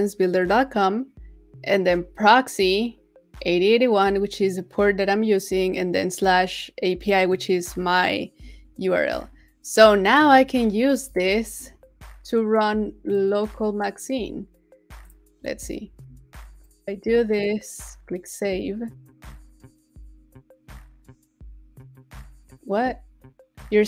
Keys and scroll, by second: 10.6 super+c, 11.1 super+c, 15.5 super+a, 15.8 super+v.